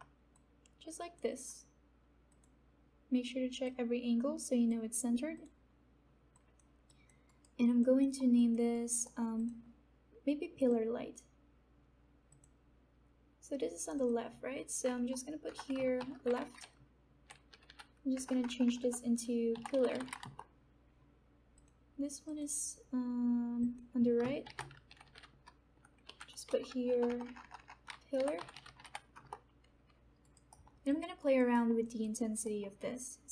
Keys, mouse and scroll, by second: 0.6-5.3 drag, 6.8 alt+click, 7.2 alt+right click, 7.5 alt+click, 8.0 alt+middle click, 8.7 alt+right click, 9.3 alt+middle click, 9.5 alt+click, 10.5 click, 14.8 BackSpace, 15.9 shift+l, 16.6 Left, 18.1 BackSpace, 19.3-20.6 typing, 21.5 click, 24.4 shift+r, 24.9 Left, 26.9 BackSpace, 27.9-29.2 typing, 30.2 alt+right click, 30.5 alt+middle click, 30.8 alt+click, 31.2 alt+right click, 31.5 alt+middle click, 31.8 alt+click, 32.8 alt+middle click.